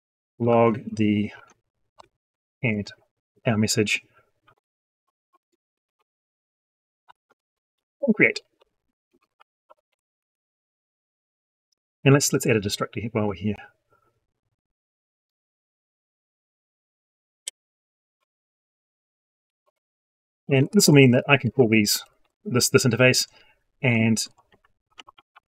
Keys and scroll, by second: 20.3 ctrl+c, 21.4 ctrl+v.